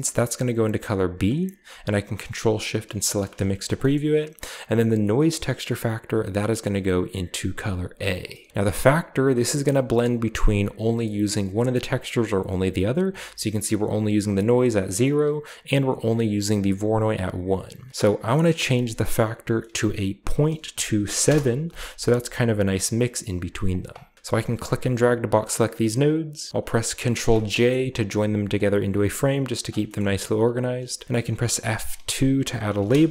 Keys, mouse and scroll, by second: 3.0 ctrl+shift+click, 5.1 click, 6.5-7.8 drag, 7.9-8.4 drag, 8.4 middle click, 8.4-9.1 scroll up 1, 9.1-17.9 drag, 18.5 click, 20.1-21.1 typing, 21.1 Return, 23.2-23.6 scroll down 2, 23.6 click, 24.1 scroll down 1, 24.3 click, 27.0 ctrl+j, 27.3-28.3 scroll down 1, 27.5-29.6 middle drag, 27.9-29.6 drag, 29.8 click, 29.9 middle click, 29.9 scroll up 2, 30.1 click, 31.4 F2, 32.7-33.1 typing.